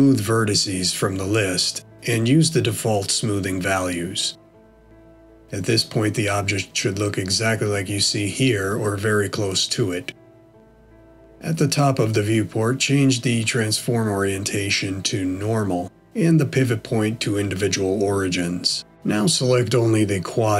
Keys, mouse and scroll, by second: 2.3 middle click, 13.8 click, 19.3 click, 20.4 shift+click.